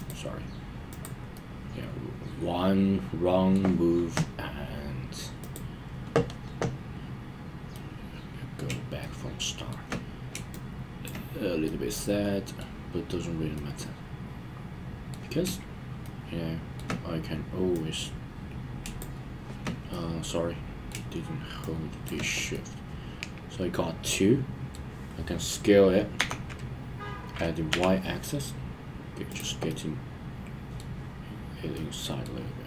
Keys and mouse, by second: 1.3-3.5 middle drag, 5.4 click, 7.7-8.6 middle drag, 9.0-9.7 shift+middle drag, 10.5-11.0 shift+drag, 11.6-12.6 middle drag, 13.5-15.1 middle drag, 16.0-16.8 shift+middle drag, 17.7 click, 18.0 click, 19.9-20.9 middle drag, 21.9 shift+click, 22.5-24.7 middle drag, 26.1 s, 27.7 y, 29.3 click, 29.7-30.9 middle drag, 31.7-32.2 middle drag.